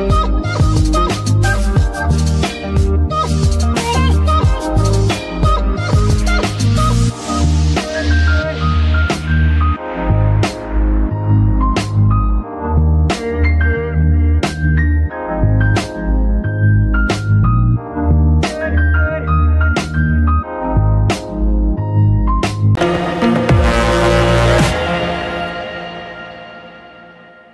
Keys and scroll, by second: 0.0 Escape, 5.8 g, 5.9 y, 7.8 Escape, 10.1 n, 10.9 y, 14.3 Escape, 15.7 g, 15.8 y, 18.6 Escape, 19.9 g, 20.5 Escape.